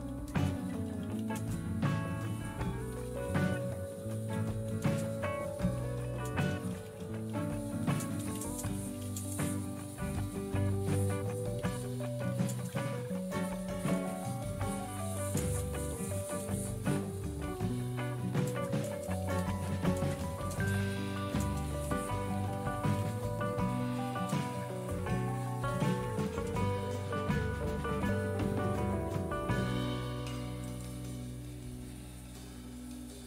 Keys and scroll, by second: 0.0-14.1 typing, 15.2-23.5 typing, 24.2 Return, 25.2-26.6 typing.